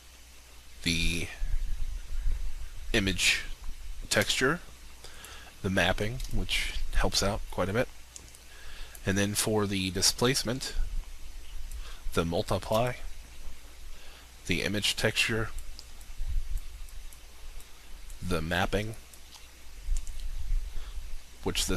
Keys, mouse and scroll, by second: 4.2 alt+shift+click, 6.2 alt+shift+click, 12.7 alt+shift+click.